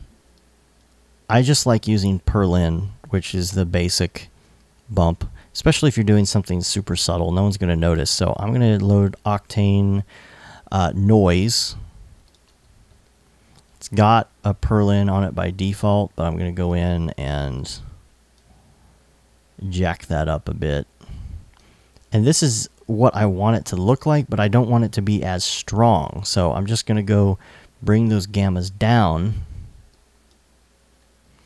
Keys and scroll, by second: 23.4 i.